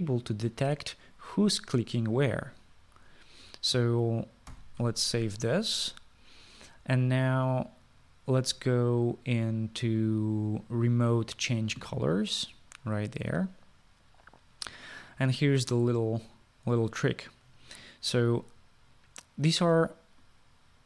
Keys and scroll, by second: 5.5 ctrl+s.